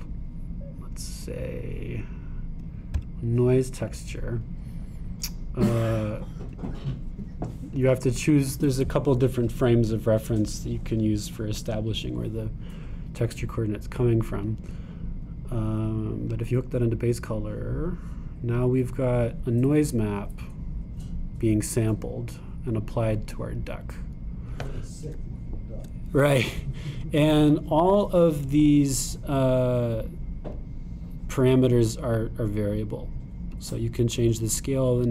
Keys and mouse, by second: 7.6-24.9 drag, 24.9 middle click, 25.4-29.9 drag, 33.2-35.1 drag.